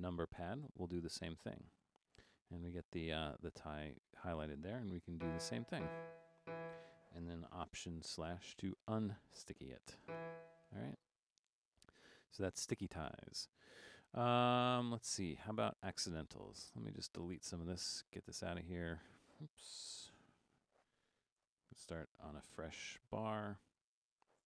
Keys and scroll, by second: 0.7 alt+/, 5.2-6.4 typing, 8.2 alt+/, 10.0 e, 16.1 Escape, 18.2 Tab, 19.6 Tab, 22.4 BackSpace.